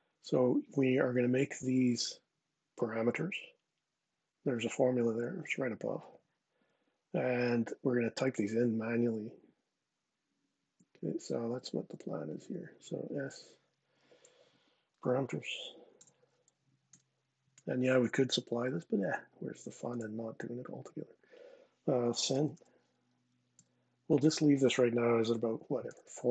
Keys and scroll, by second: 11.2 super+Tab, 13.0 s, 14.4-16.2 typing, 16.6 Return, 21.6-22.7 typing, 23.3 Tab, 23.8 Tab, 25.3-26.1 typing.